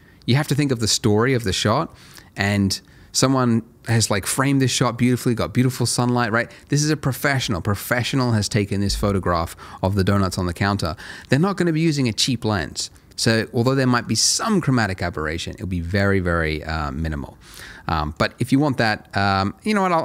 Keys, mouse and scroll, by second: 9.7 middle click, 17.3 scroll down 1, 17.6-17.9 scroll up 1, 17.9 middle click, 19.7 click.